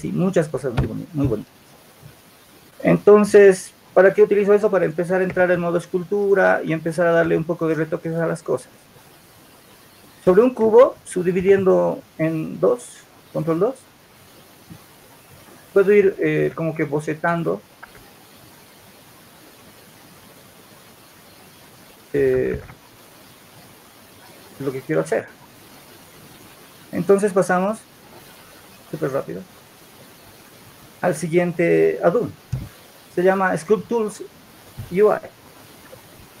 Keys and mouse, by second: 5.3 Tab, 6.0 Tab, 17.7 shift+s, 24.8-27.4 alt+drag.